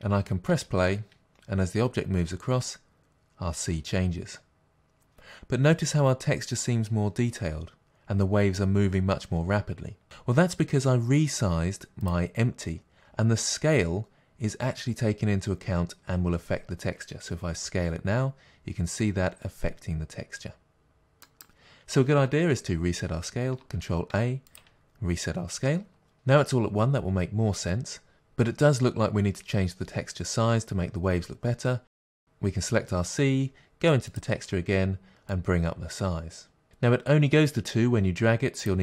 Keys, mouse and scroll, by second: 0.5 space, 10.0 space, 12.1 click, 17.7 s, 24.5 ctrl+a, 32.1 click, 35.8-38.8 drag.